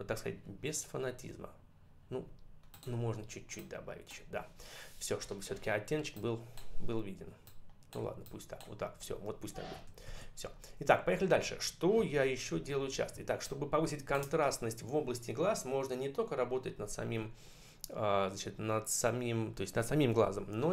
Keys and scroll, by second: 9.7 ctrl+-, 12.0 ctrl+=, 13.0 space.